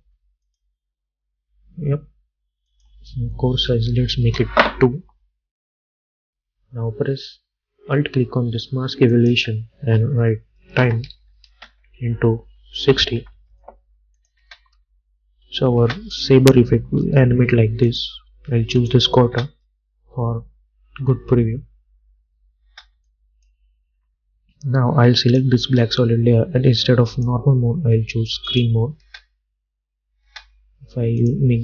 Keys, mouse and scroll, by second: 2.8 click, 4.3 Return, 9.2 alt+click, 10.7-14.5 typing, 14.3 click, 16.3 click, 17.2 u, 18.0 click, 19.4 space, 22.7 space, 23.2-25.3 drag, 29.1 space, 31.3 click.